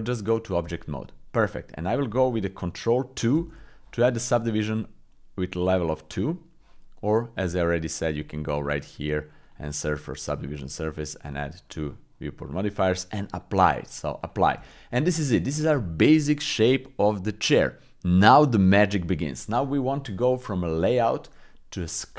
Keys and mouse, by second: 1.5 middle click, 1.7 middle click, 3.4 ctrl+2, 8.7-10.4 drag, 11.3 click, 13.5 click, 14.6 shift+click, 15.0 click, 19.1 middle click, 19.7 middle click, 20.8 click.